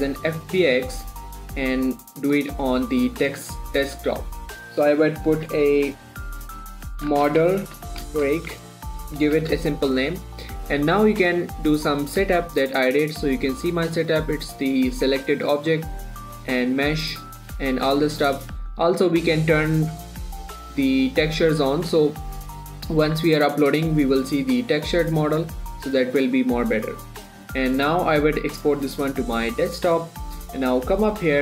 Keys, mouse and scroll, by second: 0.6 click, 7.4-9.7 typing, 10.6 click, 13.6-14.1 scroll down 1, 14.1-15.9 scroll up 1, 17.4-18.3 scroll down 1, 18.3-19.4 scroll up 1, 19.4 click, 26.3 scroll down 1, 27.3-28.1 scroll down 1, 29.9 click.